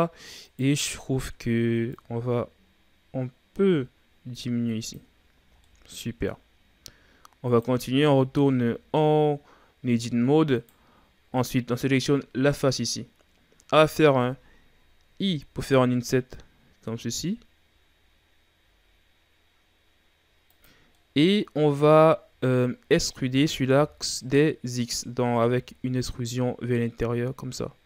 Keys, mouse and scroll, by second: 0.4 right click, 1.9-5.0 drag, 5.3-5.6 scroll down 2, 5.6-6.7 middle drag, 6.7-7.5 scroll up 3, 7.5 right click, 8.2 Tab, 8.9-10.3 scroll down 1, 10.6 right click, 11.5-13.2 scroll up 1, 13.2-15.2 scroll up 1, 20.8 scroll down 3, 21.0-22.1 middle drag, 22.1-22.5 ctrl+scroll down 3, 22.5-25.4 scroll up 2, 25.4 e.